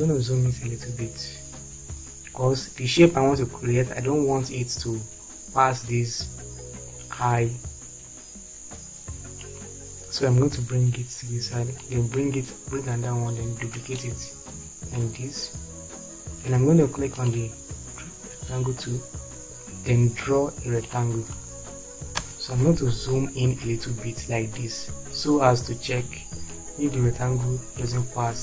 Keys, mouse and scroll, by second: 19.1 click, 22.2 space.